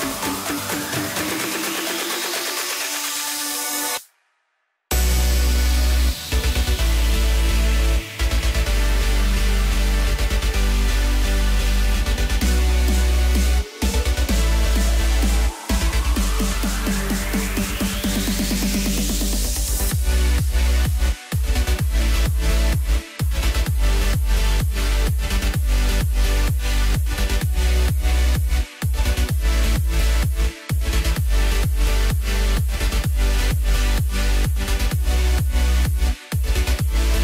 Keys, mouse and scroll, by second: 0.6-3.5 middle drag, 3.5-4.2 scroll down 4, 4.2-7.2 scroll up 2, 7.2 click, 8.0-8.8 scroll up 3, 8.8 scroll down 2, 9.2-10.3 middle drag, 10.3 KP_0, 11.1-12.4 scroll down 3, 12.4 click, 15.0-18.0 drag, 18.1-19.4 scroll up 4, 19.4 scroll up 1, 20.3-21.5 middle drag, 21.5-24.5 drag, 26.6 click, 28.1 click, 29.3 click, 29.8-31.0 drag, 32.1-33.2 drag, 34.5 click, 35.3-37.2 drag.